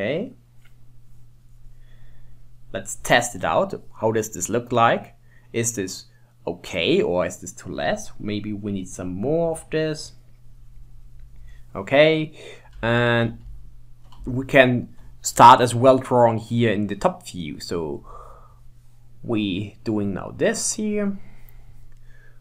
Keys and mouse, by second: 4.6-5.9 middle drag, 7.5-11.5 drag, 12.9-14.7 shift+middle drag, 16.5-22.4 drag.